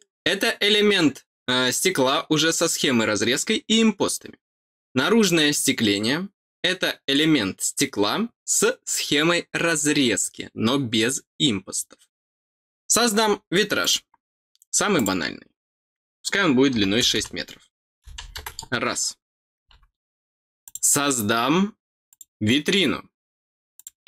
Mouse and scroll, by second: 13.8 click, 14.9 click, 19.3 middle click, 20.6 click, 22.0 click, 23.7 click.